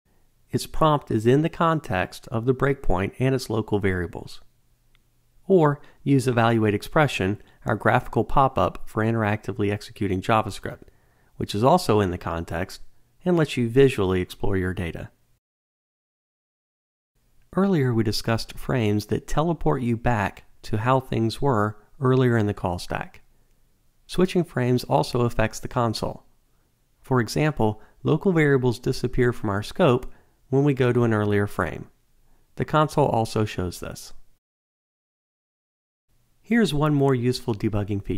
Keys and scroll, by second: 6.6 alt+F8, 29.9 Return.